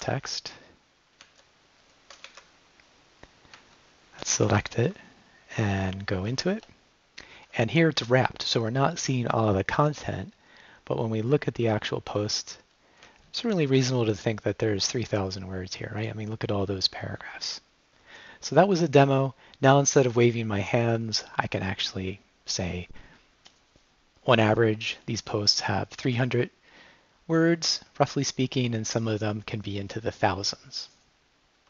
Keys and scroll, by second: 0.0-0.4 typing, 1.2 Down, 2.3 n, 3.6 Right, 4.5 s, 4.8 Up, 6.3 g, 6.5 Return, 9.8 Down, 11.4 Down, 13.5 Up, 15.2 Up.